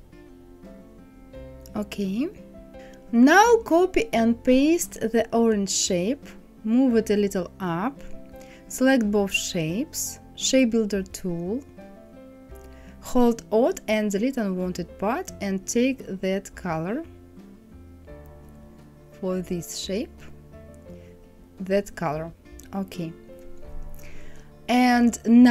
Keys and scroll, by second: 5.3 ctrl+c, 5.8 ctrl+f.